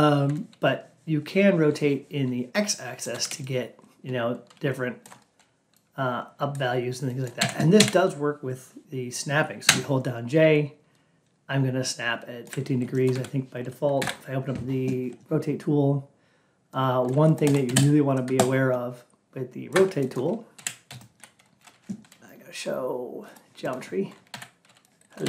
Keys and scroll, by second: 13.9 alt+p.